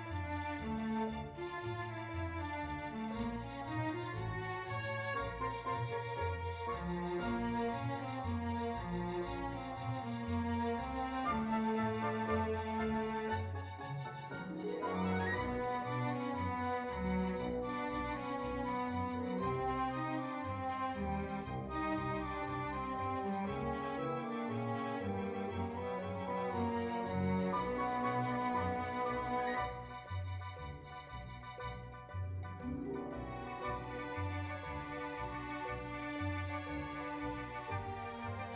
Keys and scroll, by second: 7.5-8.0 typing.